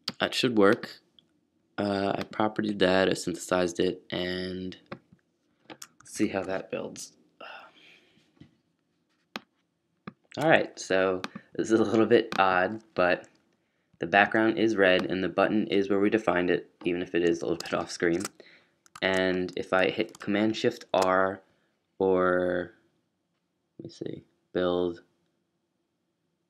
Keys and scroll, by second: 17.8-19.0 typing.